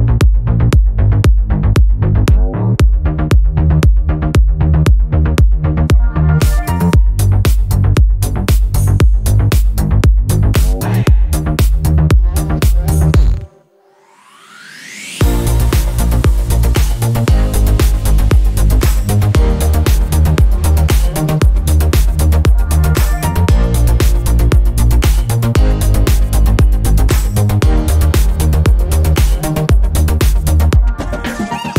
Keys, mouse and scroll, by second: 0.0 click, 2.9 ctrl+click, 6.8 click, 9.5 click, 10.5 click, 12.9 click, 15.7 click, 16.6 click, 17.6 shift+click, 19.9-22.9 drag, 23.4 click, 24.4 click, 26.6 Delete, 27.9 click, 28.9 click, 30.6 middle click, 30.8 click.